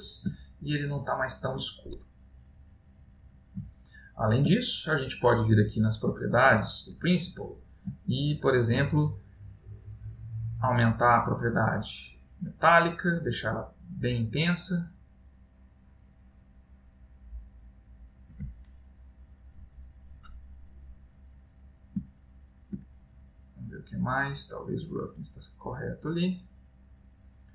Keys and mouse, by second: 0.7 middle click, 3.9 middle click, 4.7 ctrl+middle click, 5.9 click, 7.4 middle click, 8.1 ctrl+middle click, 10.3 click, 21.5 middle click, 22.1 ctrl+middle click, 23.1 middle click, 26.8 middle click.